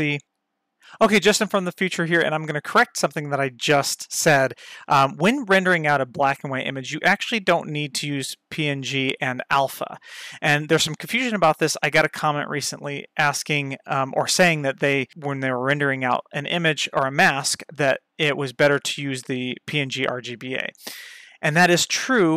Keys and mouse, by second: 6.8-7.9 drag, 8.8 click.